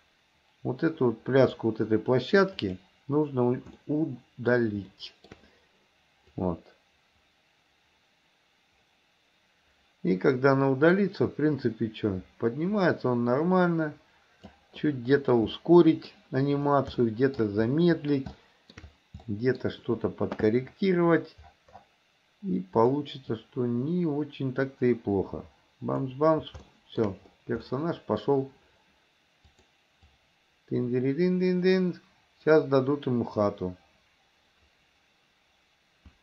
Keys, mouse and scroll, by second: 2.6 click, 3.9 middle click, 5.0 shift+middle click, 6.4-14.6 drag, 15.5 middle click, 17.0-17.4 shift+middle drag, 17.9 middle click, 18.4-18.9 shift+middle drag, 19.3 middle click, 22.9 click, 23.5-26.2 drag, 26.7 shift+middle click, 27.7 middle click, 29.6 click, 30.2-36.2 drag.